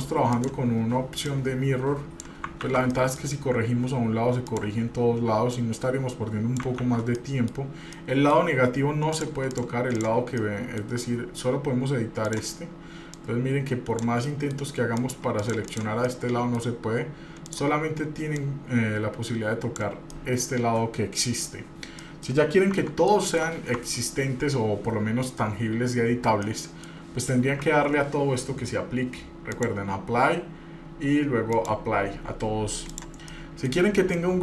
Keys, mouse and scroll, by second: 0.5 click, 1.4-2.4 drag, 2.8 ctrl+z, 3.1 middle click, 3.5 scroll up 1, 4.7 click, 5.7-6.8 drag, 7.0 ctrl+z, 7.4 middle click, 8.2 middle click, 9.3 click, 9.7 click, 10.1 click, 10.6 middle click, 12.4 click, 13.3 click, 14.4 middle click, 15.2 click, 15.6 click, 15.8 click, 16.3 middle click, 17.6 click, 18.6-20.0 drag, 20.3 middle click, 21.9-22.3 scroll down 3, 22.2 middle click, 22.9 Tab, 23.3 middle click, 24.0 Tab, 26.6 middle click, 27.8 Tab, 29.7-31.3 drag, 31.7 click, 33.1 click, 33.5-33.9 middle drag, 34.0 scroll up 1, 34.3-34.4 middle drag.